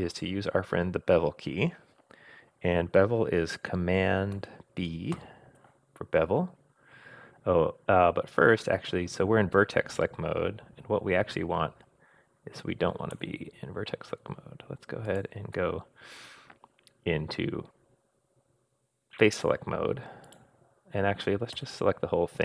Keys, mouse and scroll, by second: 5.1 super+b, 15.1 click, 20.2 click, 21.5 a.